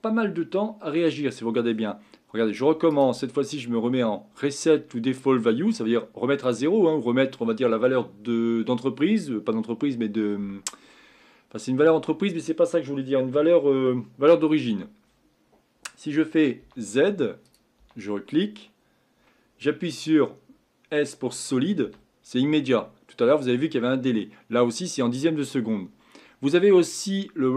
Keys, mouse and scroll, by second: 17.4 click, 17.8 z.